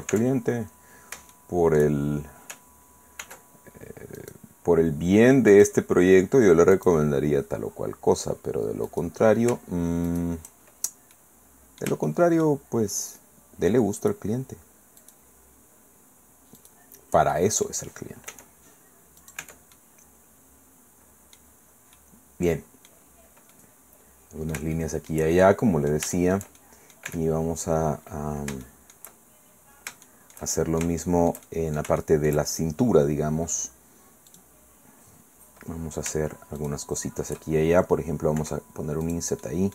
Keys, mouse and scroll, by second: 0.1 Tab, 0.5-1.3 scroll up 1, 1.3 shift+click, 3.2 ctrl+r, 4.2 click, 5.5 click, 6.7 click, 8.9 click, 10.1 shift+right click, 10.6-11.1 shift+scroll down 1, 11.4 middle click, 12.1 shift+middle click, 14.0 shift+middle click, 15.0 shift+middle click, 16.6 shift+middle click, 17.3 shift+click, 17.6 middle click, 18.3 e, 19.2 click, 19.4 Tab, 19.7 click, 20.0 middle click, 20.4-21.5 drag, 21.6 scroll down 1, 21.9-23.1 drag, 23.5 click, 24.8 shift+click, 25.5 shift+click, 25.7-27.3 middle drag, 27.1 Tab, 27.4-28.0 scroll up 1, 28.0-28.5 scroll down 1, 28.5 shift+scroll down 1, 28.6 shift+middle click, 30.0-32.5 shift+drag, 34.3 click, 36.6 shift+right click, 38.4 i, 39.0 click, 39.4 middle click.